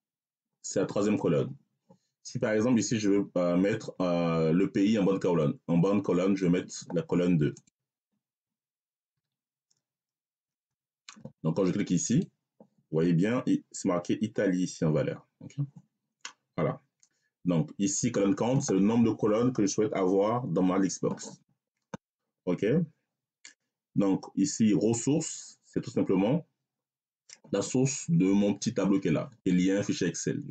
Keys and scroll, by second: 9.0 2, 10.4 Return.